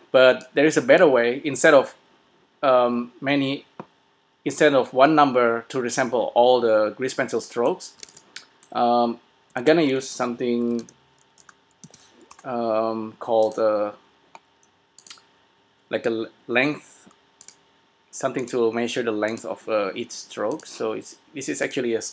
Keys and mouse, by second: 0.6-2.3 drag, 7.1-11.6 drag, 8.4 s, 9.9 shift+a, 13.7-16.7 drag, 17.6-19.8 drag, 20.8-22.1 drag.